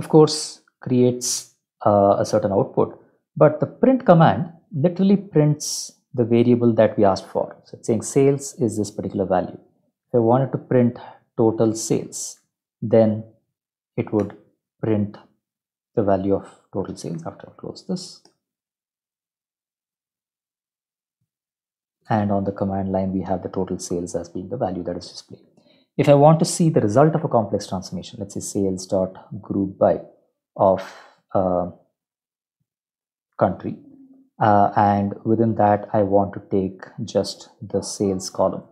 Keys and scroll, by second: 10.1 ctrl+shift+Left, 10.7-12.7 typing, 13.8 Up, 14.2 Return, 17.9 Up, 18.2 Return, 27.0 ctrl+shift+Right, 27.7-33.2 typing, 33.4 ctrl+shift+Left, 33.6 ctrl+shift+Left, 37.6-38.7 typing.